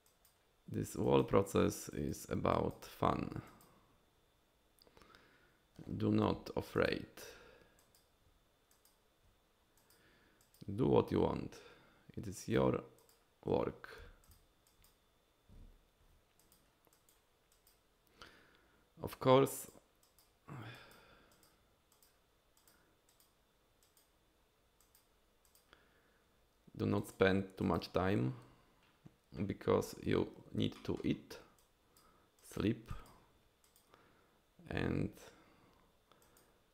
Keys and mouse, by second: 0.1 drag, 1.0 drag, 1.9 drag, 2.5 drag, 3.5 drag, 6.3 f, 7.8 click, 8.7 click, 9.8 click, 10.4 click, 12.4 click, 13.0 click, 14.0 f, 14.7 drag, 16.4 drag, 16.9 drag, 17.5 drag, 19.5 drag, 20.0 drag, 20.7 drag, 21.3 drag, 21.9 drag, 22.6 drag, 23.1 drag, 23.8 drag, 24.8 drag, 25.4 drag, 27.0 click, 27.6 drag, 30.7 shift+click, 31.6-32.0 drag, 32.4 click, 32.9 drag, 33.6 click, 36.2 drag.